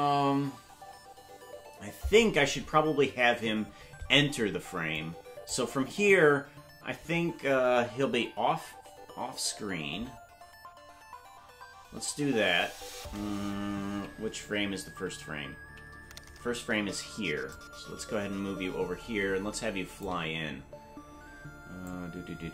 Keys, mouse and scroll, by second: 5.0 click, 13.6 Left, 14.0 Left, 14.5 Left, 15.7 Right, 17.5-20.1 shift+drag, 20.4 scroll down 3, 21.8 click.